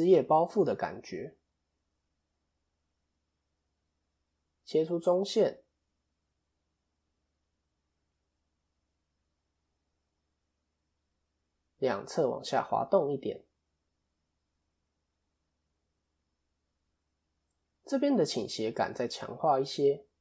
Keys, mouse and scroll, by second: 1.7 KP_7, 2.9 click, 4.3 ctrl+r, 6.1 middle click, 6.9 click, 7.6 alt+click, 8.2 scroll up 2, 8.3 middle click, 9.0 scroll up 1, 9.1 middle click, 10.7 alt+shift+click, 11.1-11.9 scroll down 5, 11.9 KP_1, 13.2 g, 15.3 middle click, 16.2 click, 16.9 KP_3, 17.8-18.3 scroll up 1, 18.3-18.6 scroll up 3.